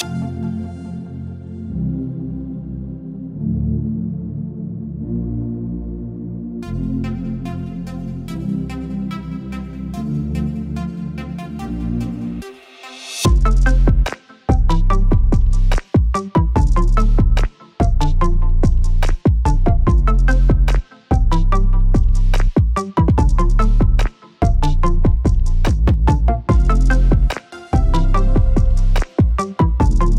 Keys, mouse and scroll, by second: 0.0 g, 2.1 right click, 2.2 g, 3.2 right click, 3.6 g, 5.6 right click, 5.8 g, 7.1 right click, 7.4 g, 9.0 g, 11.5 right click, 11.8 g, 13.3 right click, 13.6 g, 14.6 right click, 14.9 g, 16.0 right click, 16.2 g, 17.4 right click, 18.0 right click, 20.4 right click, 20.7 g, 22.3 right click, 22.6 g, 24.6 middle click.